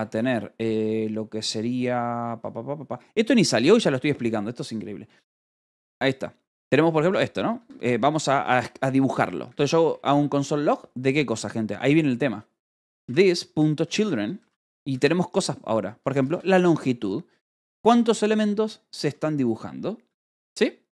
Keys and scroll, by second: 0.1 space, 2.3 =, 4.1 space, 5.5 Return, 7.5 Escape, 7.8-9.9 typing, 12.8-17.7 typing, 18.9 v, 20.0 Escape.